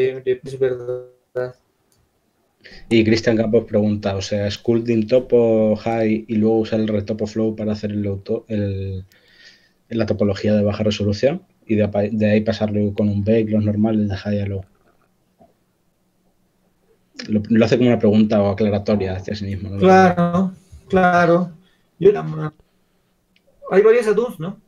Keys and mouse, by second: 1.4 click, 4.4-6.8 middle drag.